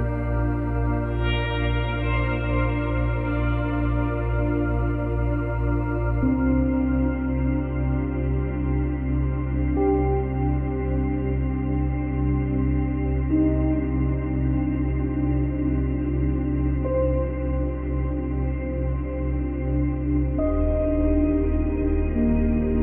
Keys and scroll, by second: 0.2 space, 7.8 ctrl+c, 8.0 ctrl+v, 12.6 ctrl+c, 12.6 ctrl+v.